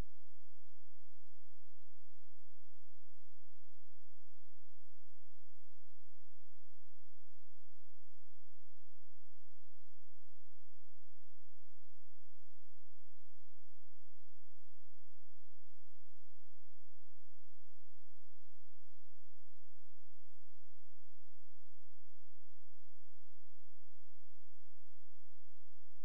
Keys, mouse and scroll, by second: 0.2 click, 3.7 click, 4.7 scroll down 1, 5.5-7.3 scroll up 1, 7.5 click, 10.9 ctrl+z, 12.1 click, 15.3 click, 20.5 click.